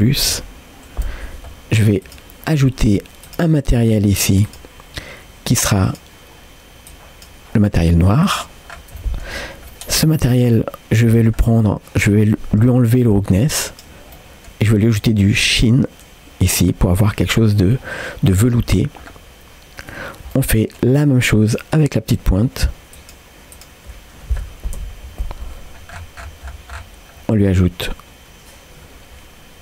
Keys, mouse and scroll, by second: 0.3 ctrl+KP_Add, 2.1-3.4 drag, 4.5-7.6 drag, 8.3 click, 8.7-9.1 scroll down 1, 9.1 shift+middle click, 9.7 middle click, 10.5-10.8 scroll up 2, 11.1-11.7 scroll down 2, 13.1-14.2 drag, 14.2 middle click, 15.0-17.2 drag, 17.3 scroll up 2, 17.8 middle click, 18.5 middle click, 19.1 scroll down 1, 20.4 middle click, 21.6 middle click, 23.0 alt+click, 23.7 alt+click, 24.8 ctrl+KP_Add, 25.9-27.9 scroll up 8, 27.9-29.0 scroll up 1.